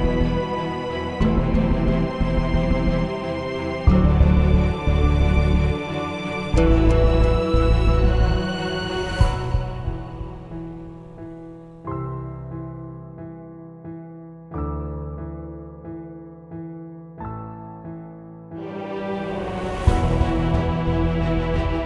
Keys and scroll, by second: 3.9 Down, 4.1 Return.